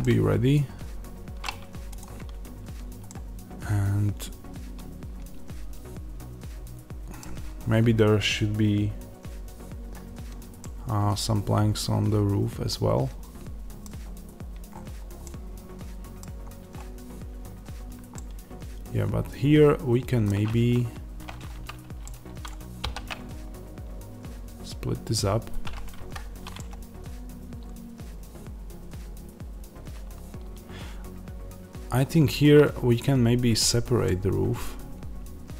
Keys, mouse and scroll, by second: 1.9 click, 2.1 Tab, 2.9-35.5 middle drag, 7.3 Tab, 13.8 scroll down 1, 14.6-15.2 scroll up 1, 16.1 scroll down 1, 20.4 Tab, 22.7 ctrl+r.